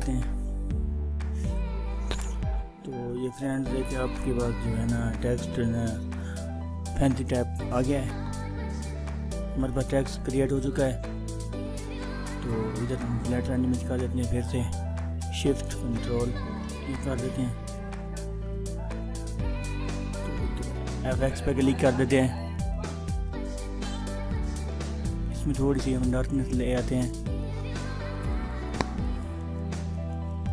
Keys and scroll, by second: 10.7 ctrl+-, 16.2 ctrl+shift+a.